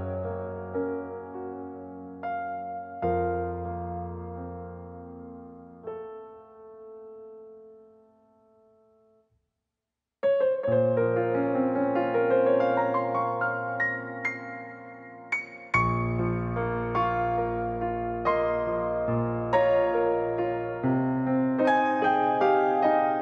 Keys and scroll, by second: 0.4 l, 4.4 space, 12.2-14.5 typing, 17.7-18.5 typing, 18.5 Return, 20.1-20.6 typing, 21.9-22.6 typing.